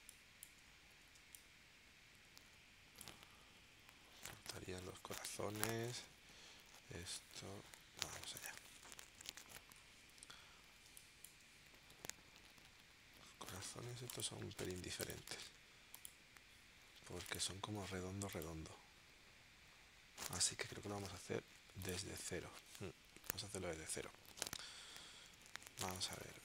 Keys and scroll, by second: 0.0 space, 1.2 space, 10.9 space, 22.6 super+z, 25.5 shift+w, 25.8 space.